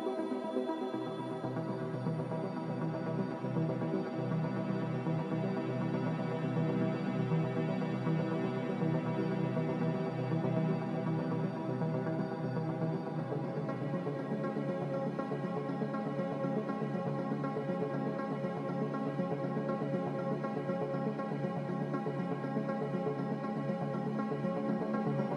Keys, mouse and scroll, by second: 4.0 b, 18.3 z, 18.7 s.